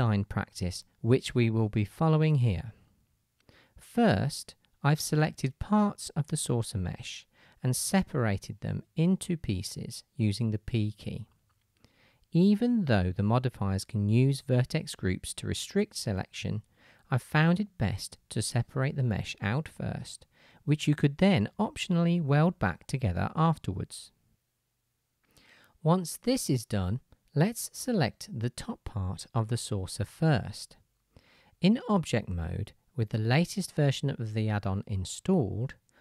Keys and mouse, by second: 0.0-3.4 middle drag, 3.4-7.9 drag, 4.0 KP_3, 5.5 3, 7.1 p, 7.9 middle click, 8.4-11.7 drag, 9.2 ctrl+KP_Add, 9.7 p, 11.7 shift+middle click, 12.0 click, 12.1 shift+middle click, 12.4 click, 12.7 p, 14.7 p, 15.5 click, 15.5 shift+middle click, 15.9 click, 16.3-19.3 middle drag, 18.1 p, 19.5 alt+click, 20.1 ctrl+KP_Add, 20.4 p, 20.8 Tab, 21.5 KP_1, 21.6 KP_3, 22.1-24.1 middle drag, 24.1 shift+click, 24.7-25.7 middle drag, 25.7-27.9 drag, 27.9-36.0 middle drag.